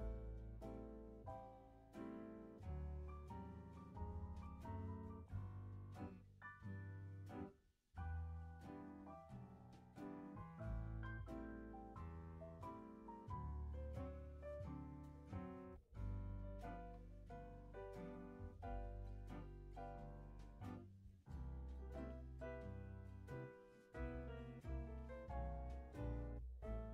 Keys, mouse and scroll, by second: 2.0-6.4 drag, 8.1 click, 9.2-10.2 drag, 10.2 space, 10.8 space, 11.8-15.0 drag, 16.0-16.3 scroll down 2, 16.3 click, 16.6-17.2 scroll down 1, 17.2-17.6 scroll up 2, 17.2 middle drag, 17.6-18.2 scroll down 1, 18.2-19.3 scroll up 4, 19.3-19.7 scroll up 1, 19.7 click, 20.6-21.6 drag, 21.6 middle click, 21.6-22.1 scroll up 3, 22.1 scroll down 3, 22.3 click, 22.9 g, 24.3 click.